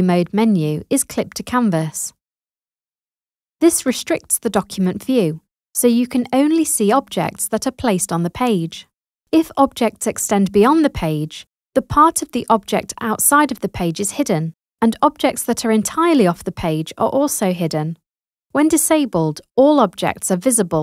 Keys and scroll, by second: 19.4 i.